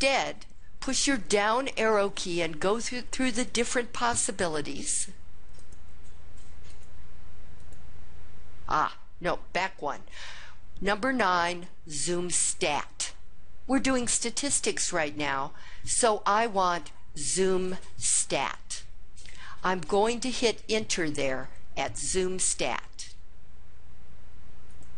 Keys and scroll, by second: 24.7 Return.